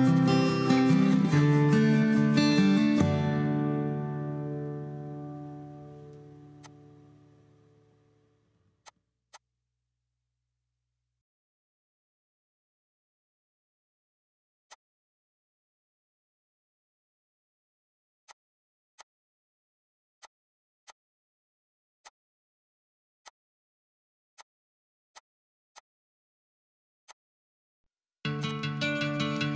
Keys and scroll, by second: 14.5 r, 15.8 Escape, 16.6 Escape, 27.5 ctrl+v, 27.7 Return.